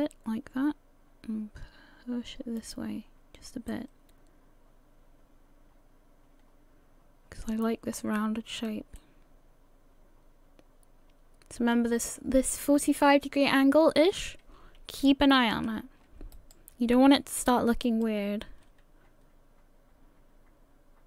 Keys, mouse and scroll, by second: 3.7 middle click, 9.0 middle click, 14.8-15.5 scroll up 1, 16.3 right click, 17.9 right click, 18.5 g.